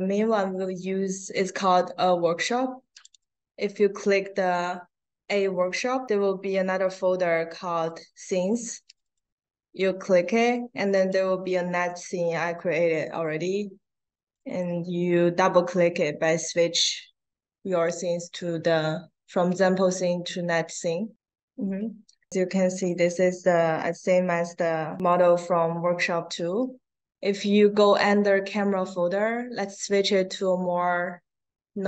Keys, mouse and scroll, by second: 2.9 click, 8.9 click, 10.9-11.6 drag, 14.4 click, 21.9 middle click, 21.9 scroll down 1, 22.3 click, 24.9 click, 27.3 click, 29.1 click.